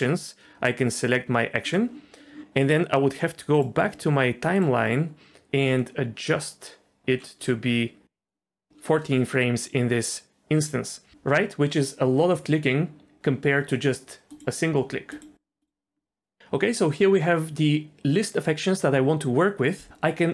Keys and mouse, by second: 4.6-8.7 drag.